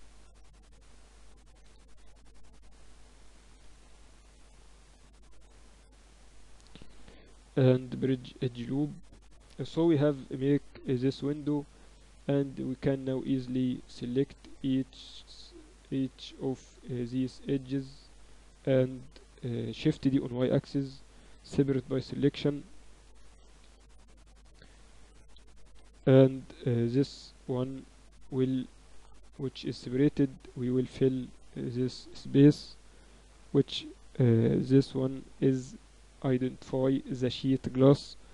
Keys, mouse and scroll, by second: 0.0-3.7 middle drag, 3.7-4.7 drag, 3.7-4.0 KP_4, 4.3 KP_4, 4.5 KP_4, 6.1 click, 6.8 w, 8.6 Tab, 9.7 KP_1, 11.1 KP_8, 11.5 KP_6, 11.6 KP_6, 12.1 Tab, 13.9-15.9 middle drag, 14.6 a, 16.3-18.6 right drag, 17.1 z, 18.3 z, 18.6-20.1 middle drag, 18.6 z, 20.1 shift+d, 21.4 o, 22.9 Escape, 23.5 p, 25.2 o, 27.3-28.6 drag, 28.9 Tab, 29.7-31.5 drag, 30.1 Tab, 30.3 a, 30.5 a, 32.3-33.5 drag, 32.6-35.4 typing, 35.9 Tab, 36.7 KP_1, 37.0 z.